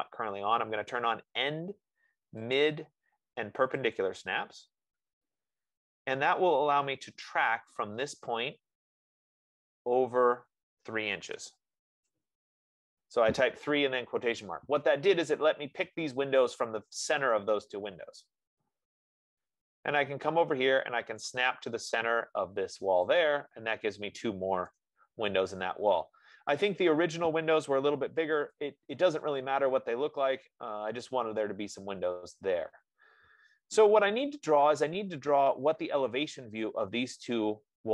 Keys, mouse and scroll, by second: 0.3 click, 2.9 click, 11.6 3, 12.2 shift+', 12.4 Return, 19.4 scroll down 2, 20.2 scroll down 2, 20.4-21.4 scroll, 23.5 click, 26.5-26.9 scroll, 26.9 middle click, 28.9 click, 31.0 middle click, 31.2 scroll, 32.7-33.4 scroll down 2.